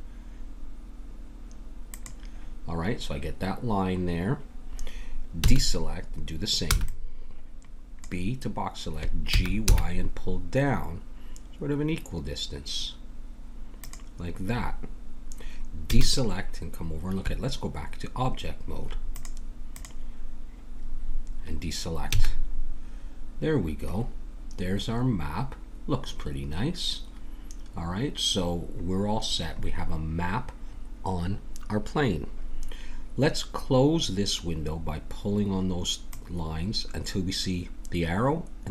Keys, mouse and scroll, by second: 5.4 a, 6.6 b, 9.3 g, 15.9 a, 19.3-22.1 drag, 22.1 a, 23.9 click, 28.9-30.9 middle drag, 36.0-38.0 drag.